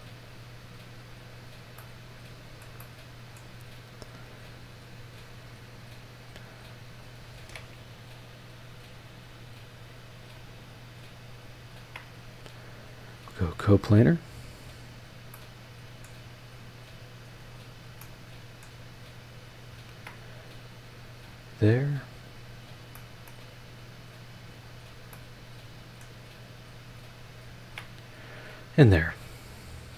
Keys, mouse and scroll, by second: 1.0 click, 1.3-1.8 scroll down 2, 1.8-3.5 middle drag, 1.8 click, 2.9 click, 4.2-4.6 scroll up 1, 6.9 click, 9.0 click, 9.8 click, 10.3-10.6 scroll up 2, 11.7 ctrl+click, 13.0 click, 14.3 click, 14.7-15.0 scroll down 1, 15.3-16.2 middle drag, 16.3 scroll up 1, 16.9 scroll up 2, 17.4 click, 17.7-18.0 scroll down 2, 18.0-18.8 middle drag, 18.9-19.7 scroll up 5, 19.9 ctrl+click, 21.2 click, 21.7-22.0 scroll down 2, 22.6 click, 22.9 middle click, 23.7-24.0 scroll up 2, 24.5 click, 24.8 scroll down 2, 25.1-26.2 middle drag, 26.8-27.4 scroll up 4, 27.6 ctrl+click, 28.8 click, 29.7-29.9 scroll down 2.